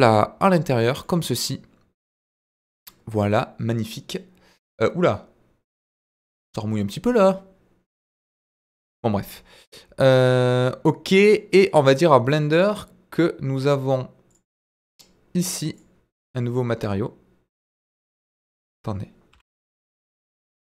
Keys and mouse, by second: 0.7 click, 1.1 middle click, 2.3-7.4 middle drag, 8.8-9.2 middle drag, 10.1 click, 12.5 click, 14.4 click, 15.7 drag.